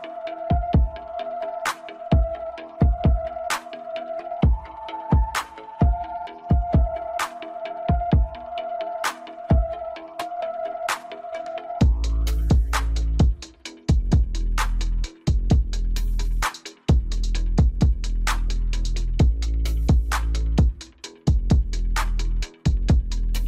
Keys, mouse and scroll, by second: 1.0 KP_1, 2.1 scroll up 1, 2.8 scroll up 1, 3.9 Tab, 4.9 Tab, 5.8 click, 7.1 scroll up 1, 8.8-11.8 scroll down 1, 12.8-15.7 drag, 17.8 click, 20.5-20.9 scroll up 2, 20.9-22.4 shift+middle drag, 22.4 scroll up 1, 22.8-23.4 scroll down 2.